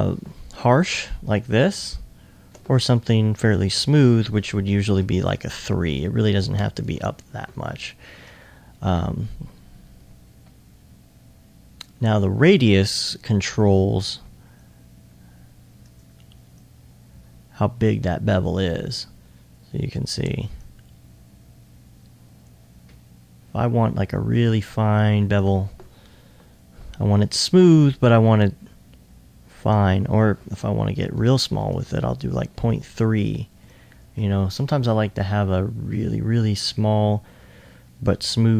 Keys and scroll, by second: 4.9 typing, 5.1 Tab, 6.7-8.1 typing, 10.5 2, 10.8 2, 31.1 ■, 31.7 Tab.